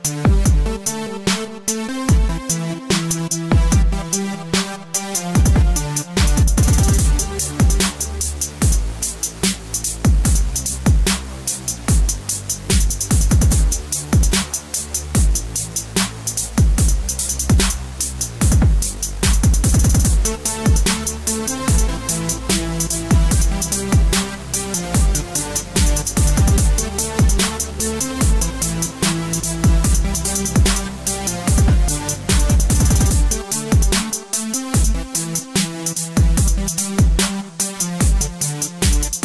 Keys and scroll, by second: 4.3 Right, 24.2-26.1 typing, 26.2 Return.